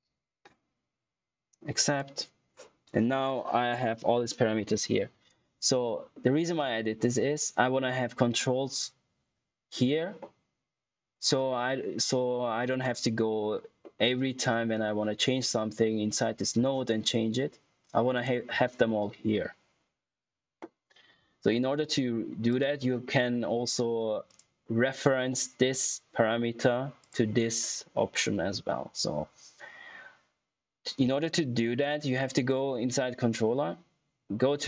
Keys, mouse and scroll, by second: 1.7 click, 5.2 click, 11.2-11.6 scroll down 1, 11.6-12.3 scroll up 1, 12.7 click, 13.7 middle click, 18.1 click, 22.4 click, 26.9 click, 32.3 click.